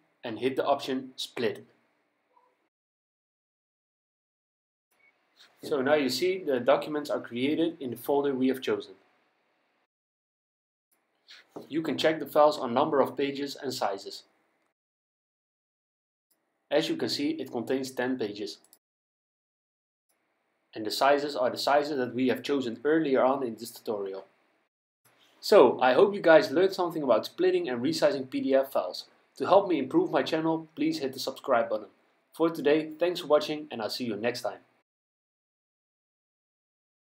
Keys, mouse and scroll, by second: 0.8 click, 3.4 click, 5.5 click, 7.4 click, 9.4 click, 10.9 click, 12.5 click, 15.2 click, 26.7 click.